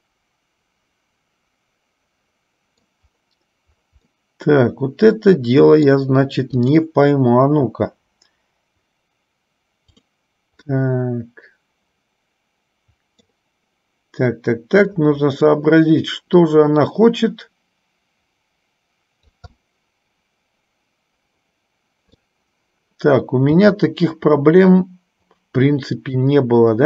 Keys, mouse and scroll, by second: 4.3 scroll down 1, 4.6-6.2 middle drag, 6.8 click, 7.8 g, 10.1 click, 11.1-13.6 middle drag, 15.1 middle click, 16.7-19.8 drag, 19.8-22.6 middle drag.